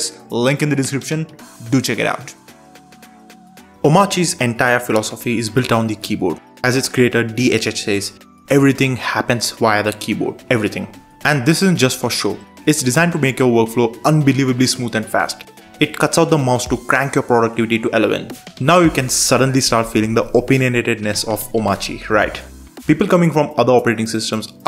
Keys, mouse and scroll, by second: 8.4 super+space, 9.5-10.7 typing, 10.8 Return, 12.5-13.8 typing, 14.3 Return, 15.5-16.5 typing, 16.6 Return, 21.7 super+Return, 23.0-24.6 typing.